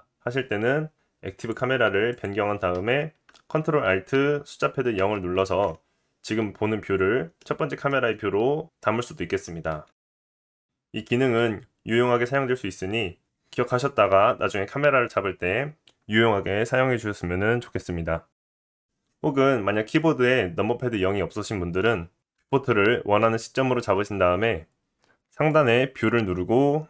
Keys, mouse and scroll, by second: 1.4-18.8 drag, 5.0 ctrl+alt+KP_0, 7.4 middle click, 18.8-25.5 middle drag, 25.5-26.8 drag.